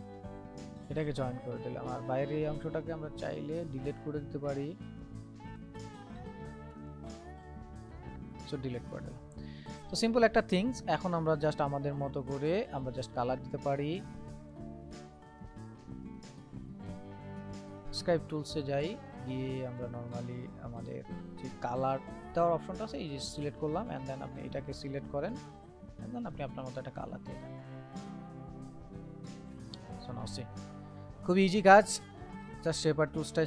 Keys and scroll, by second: 4.6 ctrl+z.